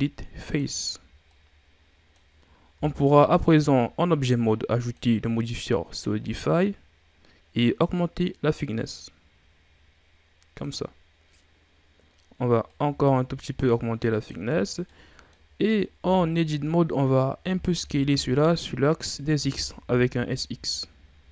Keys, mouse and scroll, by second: 1.3-2.8 middle drag, 2.8 Tab, 4.8 click, 6.4-10.6 drag, 12.6-14.6 drag, 14.6 scroll down 2, 14.8 middle click, 15.5-16.0 scroll up 2, 16.0 Tab, 17.4 a, 17.7 a, 18.1 a, 19.4 s.